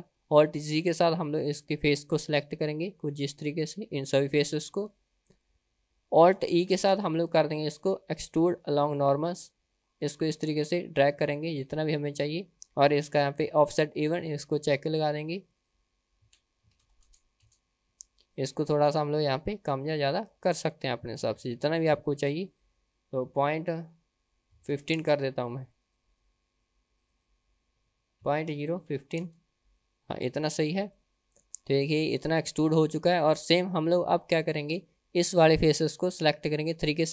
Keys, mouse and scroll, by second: 0.9 alt+z, 1.3 drag, 2.5-3.7 drag, 4.7 alt+z, 6.9 alt+e, 14.7 click, 15.6-22.1 drag, 22.5-30.1 drag, 31.5-32.5 middle drag, 32.7-33.1 scroll down 2, 33.1-33.5 middle drag, 34.1 Tab, 34.4 middle click, 36.9 3.